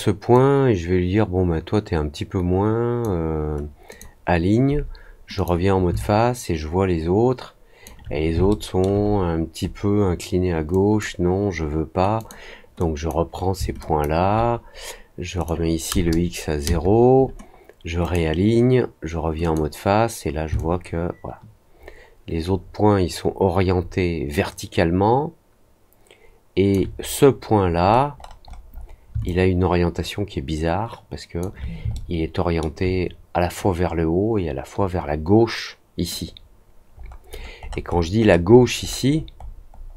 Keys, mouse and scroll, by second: 0.3-2.9 drag, 3.8 click, 5.3 click, 5.9-7.8 alt+drag, 8.4 alt+middle click, 9.0-9.7 scroll down 2, 10.6 click, 12.1 click, 12.7 click, 13.7 shift+click, 15.3 click, 18.0 click, 19.4 click, 20.5-26.6 alt+drag, 27.8 middle click, 28.1 middle click, 28.4 middle click, 28.6 middle click, 29.2-31.3 alt+drag, 31.9 alt+middle click, 36.9-37.9 scroll down 4, 37.9 scroll up 1, 38.1-39.8 scroll down 12.